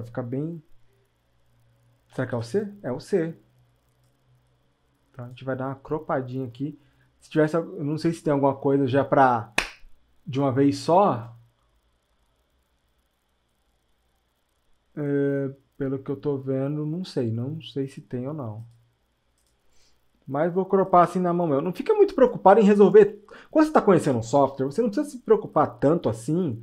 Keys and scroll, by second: 2.3 c.